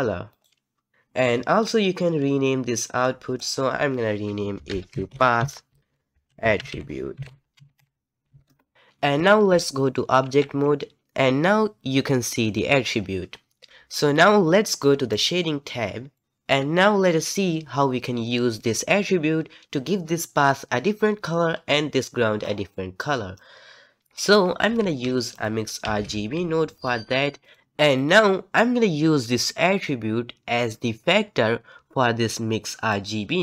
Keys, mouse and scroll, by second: 0.4-8.5 drag, 8.5 t, 8.7 z, 10.4 ctrl+Tab, 11.4 z, 11.5-13.7 scroll up 1, 13.7 z, 15.2 click, 16.1-27.6 middle drag, 32.9 click.